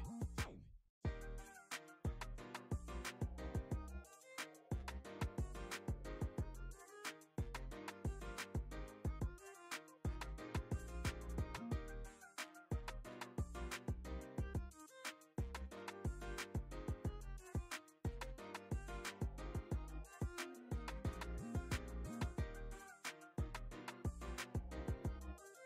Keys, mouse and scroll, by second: 0.1-1.3 drag, 1.7-3.6 drag, 3.7 middle click, 4.1-5.2 drag, 5.3 middle click, 5.6 click, 6.2 middle click, 6.4 shift+middle click, 6.8 click, 7.4 middle click, 7.8 click, 8.6 middle click, 8.8 shift+middle click, 9.0 middle click, 9.4 click, 9.9 click, 10.9 click, 11.6 shift+middle click, 11.9 click, 12.7 middle click, 13.0 middle click, 13.3 click, 14.1 shift+middle click, 14.3 middle click, 14.7 middle click, 15.0 click, 15.5 click, 16.2 click, 16.7 shift+middle click, 17.1 click, 18.2 f, 18.5 click, 19.3 click, 19.6 click, 20.3 click, 20.7 ctrl+middle click, 21.0 middle click, 21.2 ctrl+middle click, 21.5 shift+middle click, 21.8 click, 22.2 f, 22.6 click, 22.9 ctrl+z, 23.2 click, 24.6 middle click, 24.9 click, 25.6 ctrl+middle click.